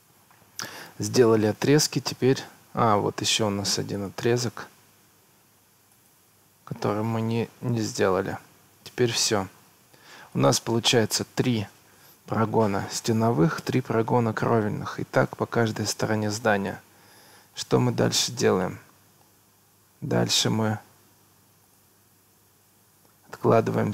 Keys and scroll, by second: 0.1 Escape, 11.0 Escape.